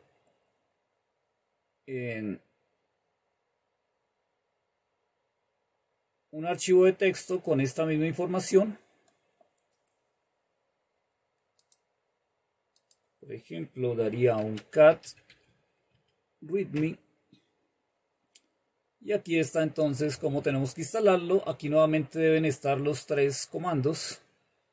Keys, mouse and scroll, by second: 0.0 click, 0.9-2.3 scroll down 2, 2.3-2.9 scroll down 1, 2.9-3.6 scroll down 1, 3.6-4.9 scroll down 1, 4.9-5.6 scroll down 1, 5.6-6.4 scroll down 1, 6.4-7.2 scroll down 1, 7.2-9.3 scroll down 1, 11.8 click, 13.0 click, 13.8 typing, 15.2-15.5 typing, 16.2 Tab, 16.9 typing, 18.7-19.6 scroll up 1, 19.6-21.1 scroll up 1, 21.1-23.2 scroll up 1, 23.2-24.3 scroll up 1, 24.3-24.7 scroll up 1.